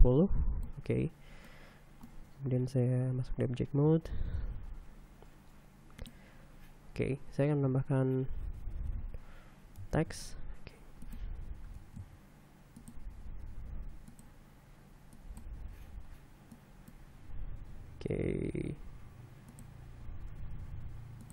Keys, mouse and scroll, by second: 0.0-1.5 drag, 2.1 click, 3.2 Tab, 4.9 shift+a, 8.2 r, 9.4 x, 10.4 9, 10.6 0, 12.4 r, 12.6 z, 14.1 g, 14.8 click, 15.8 click, 17.2 click, 18.9 g, 19.2 x, 20.1 click, 21.0 g, 21.2 y.